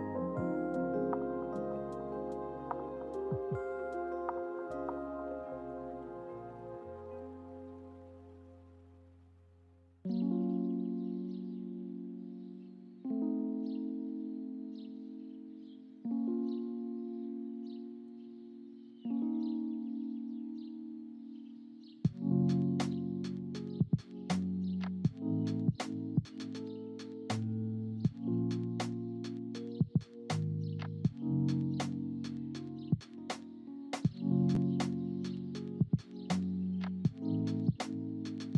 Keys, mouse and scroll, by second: 19.9-25.8 drag, 26.8 click, 28.4 click, 29.9 space, 30.8 ctrl+z, 31.4 ctrl+z, 33.8 click, 37.2 space, 37.7 click.